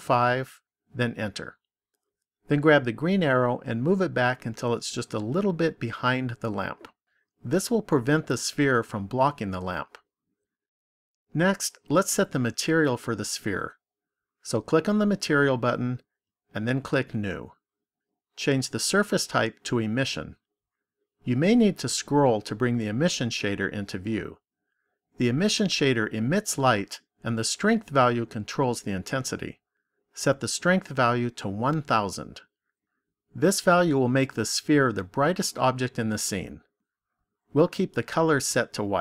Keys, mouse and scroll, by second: 3.1 click, 14.7 click, 16.9 click, 19.7 click, 30.8 click, 32.4 KP_0.